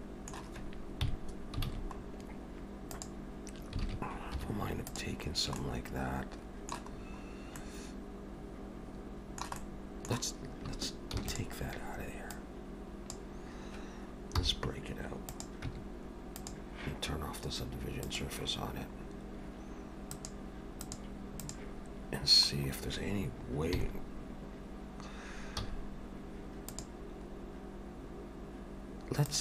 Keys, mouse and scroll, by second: 1.1 KP_3, 1.7 alt+a, 2.0-2.9 scroll up 3, 2.9 click, 3.9 alt+a, 4.4 3, 4.9 click, 5.3 scroll down 1, 5.6 middle click, 7.0 scroll up 2, 7.6 middle click, 9.6 middle click, 11.2 shift+d, 12.4 click, 14.4 p, 15.7 Tab, 16.4 click, 18.1 click, 19.1-20.1 scroll down 1, 20.1 click, 23.7 KP_3, 25.6 z, 27.2-27.5 scroll up 3, 29.3 click.